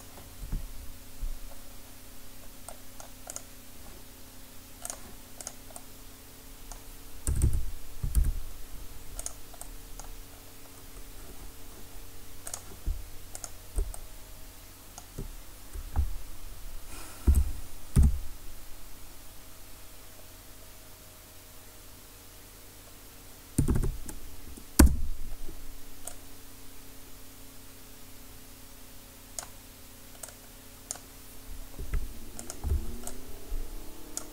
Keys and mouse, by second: 3.3-7.3 drag, 4.9-7.3 right drag, 6.0-7.3 middle drag, 7.3 a, 7.4 a, 8.2 w, 12.5-15.6 drag, 17.3 r, 26.1-29.4 drag, 30.2-32.4 drag, 32.4-34.3 right drag, 33.1-34.3 drag.